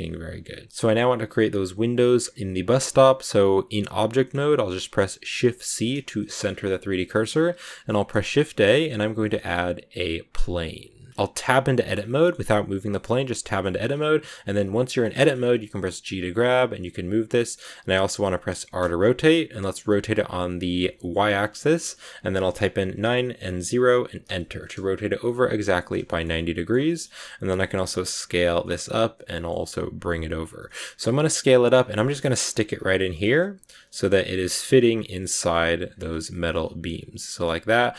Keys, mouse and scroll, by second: 0.7 Tab, 0.7 scroll down 1, 1.1 a, 1.6 a, 4.1 middle click, 4.3 click, 5.6 shift+c, 6.1 shift+middle click, 6.4 scroll up 4, 7.0 shift+middle click, 7.4 shift+a, 11.1 scroll up 1, 11.2 Tab, 12.1-13.8 middle drag, 13.8-14.9 scroll up 2, 14.9 shift+middle click, 15.7 g, 24.6-27.0 middle drag, 27.0-27.3 scroll down 2, 27.3 s, 28.5-29.5 middle drag, 29.5 g, 30.6 middle click, 31.2 s, 31.9 scroll up 1, 32.0 middle click, 32.2 g, 35.1 middle click, 35.6 g, 36.0 middle click, 36.5 g, 37.0 scroll up 2, 37.0-37.7 scroll down 4, 37.1 middle click, 37.7 middle click.